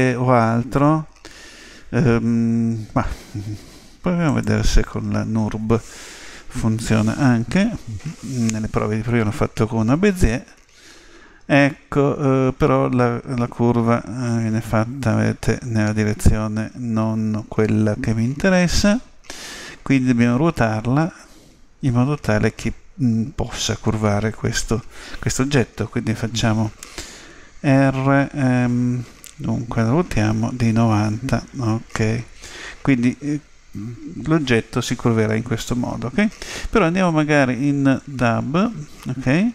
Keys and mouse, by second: 10.4 z, 30.1 r, 37.0 Tab.